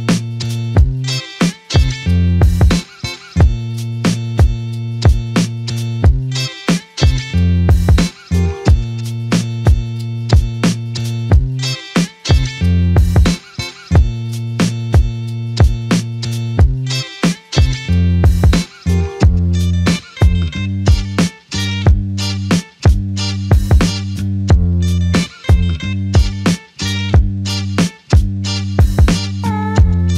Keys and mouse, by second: 0.7 shift+click, 5.4 alt+m, 7.1 alt+click, 8.3 alt+shift+click, 10.0 alt+click, 14.3 typing, 15.7 alt+click, 16.6 alt+click, 16.9 alt+click, 17.8 alt+click, 17.9 ctrl+click, 18.8 ctrl+click, 21.7 double click, 27.6 alt+click, 29.3 double click.